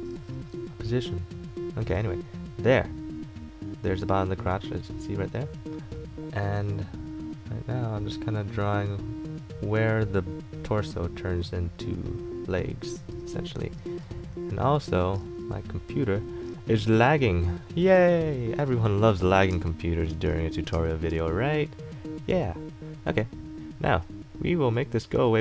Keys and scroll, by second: 16.7 ctrl+z, 19.7 space, 20.5 shift+z, 20.9 space.